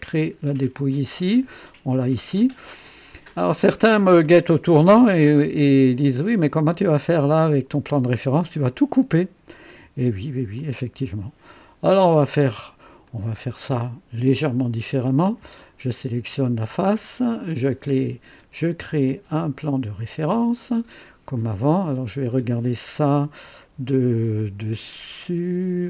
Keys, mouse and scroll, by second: 0.9 click, 2.3 click, 3.3 click, 4.2 click, 4.9 KP_2, 6.0-6.7 right drag, 9.0 click, 9.7 click, 10.6 click, 11.5-12.3 drag, 13.0 click, 17.7 click, 21.6-22.6 drag, 23.7 KP_2, 24.7 right click.